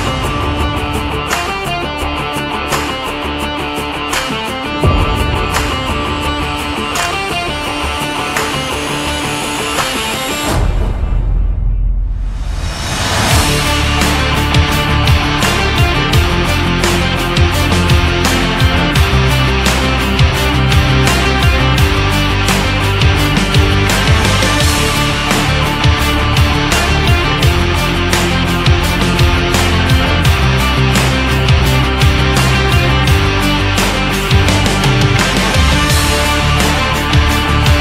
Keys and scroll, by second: 0.4 Down, 0.9 Left, 2.5 Down, 3.2 Left, 14.6 space, 22.6 shift+x.